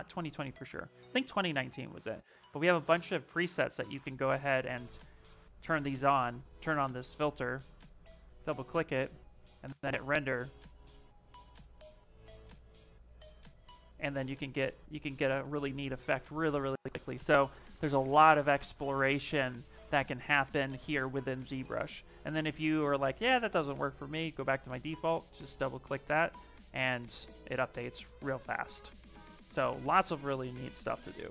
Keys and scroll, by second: 8.6 ,, 9.3 shift+r, 14.4 f, 15.1 shift+r, 21.8 ,, 30.8 ,.